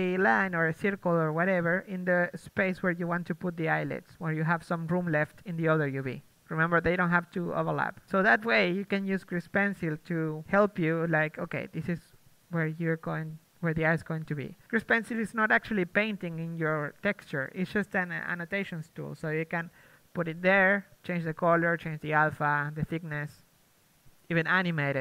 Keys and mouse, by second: 0.0 a, 2.3 d, 7.1 d, 7.1 a, 7.7 Tab, 8.2 Tab, 9.2 a, 9.6 a, 10.0 s, 11.0 g, 12.0 s, 12.6 g, 12.9 s, 13.7 Tab, 14.4 Tab, 15.4 a, 16.8 Tab, 18.3 Tab, 18.6 s, 19.4 Tab, 20.5 Tab, 21.4 Tab.